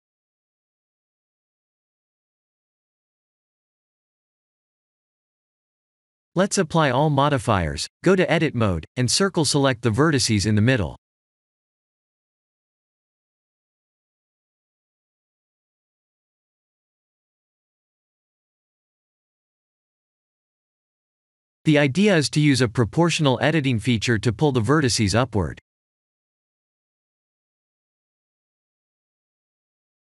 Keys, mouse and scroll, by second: 1.8 right click, 4.6 middle click, 5.2-6.4 scroll down 3, 5.7 middle click, 6.4 click, 7.1 click, 9.3 click, 9.8 ctrl+a, 11.4 Tab, 12.2 1, 13.9 KP_7, 14.9-15.4 scroll up 4, 15.5 shift+middle click, 19.2 click, 20.5 c, 21.5 right click, 22.1-22.9 scroll down 2, 22.9 middle click, 22.9 scroll down 4, 25.8 click, 27.1 g, 27.5 z, 28.5-28.8 scroll down 2.